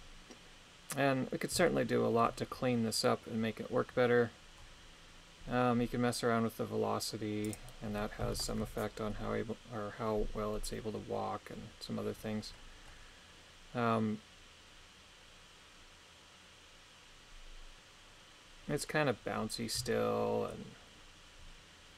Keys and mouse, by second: 1.7 shift+middle click, 7.5-8.6 drag, 19.9 shift+middle click.